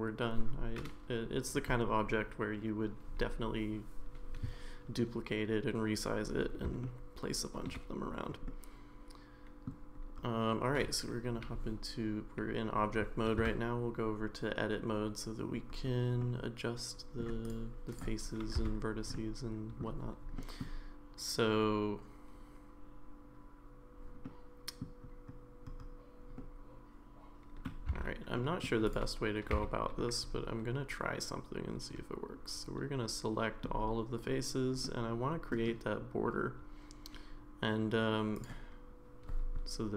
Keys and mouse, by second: 6.8-7.7 shift+middle drag, 8.5-9.7 middle drag, 13.4 Tab, 16.2-17.2 middle drag, 17.4 click, 19.1 middle click, 19.1 1, 20.4 middle click, 24.2 middle click, 26.4-27.7 middle drag, 27.9 3, 28.3 middle click, 28.9 click, 29.5 a, 30.0-33.6 middle drag, 34.8 middle click, 38.3 click.